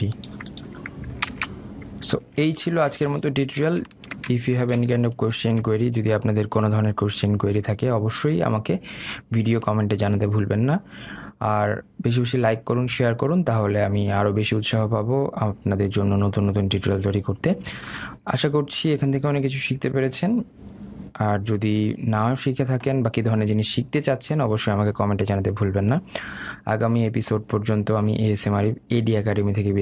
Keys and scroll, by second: 2.9 ctrl+z.